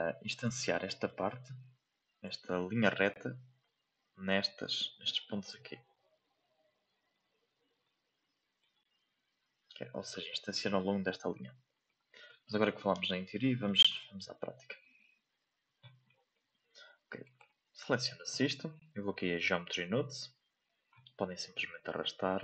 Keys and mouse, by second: 1.1 click, 2.7 shift+middle click, 3.6-4.6 drag, 5.4 shift+middle click, 6.3 click, 7.8 click, 11.6 shift+middle click, 12.1 middle click, 13.0-14.7 ctrl+drag, 15.3 click, 16.0 shift+middle drag, 17.2 right click, 17.8 shift+middle drag.